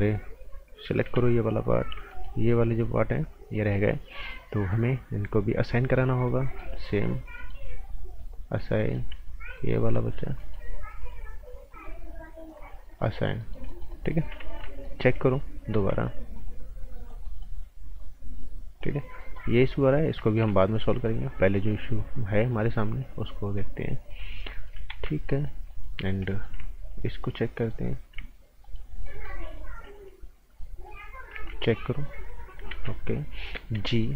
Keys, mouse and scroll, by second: 0.0-1.0 scroll up 1, 1.0 b, 1.6 click, 2.1 alt+right click, 5.3 click, 6.4 right click, 7.3 right click, 8.5 click, 8.8 right click, 9.5 click, 10.4 right click, 11.0 click, 13.2 scroll down 1, 13.4 right click, 14.3 z, 14.7 scroll down 1, 14.8 right click, 15.7 z, 16.0 click, 18.0 click, 18.9-19.5 scroll up 2, 19.2 right click, 20.7 scroll down 1, 20.9 right click, 21.5 click, 24.3 scroll down 1, 24.5 right click, 24.9 ctrl+z, 25.1 scroll up 1, 25.3 right click, 25.9 scroll up 1, 26.2 right click, 26.9 alt+click, 27.6 click, 28.6 alt+right click, 29.0 right click, 30.8-31.3 scroll down 1, 31.3 z, 31.9 click, 32.7 ctrl+z, 33.5-34.1 typing, 34.0 right click.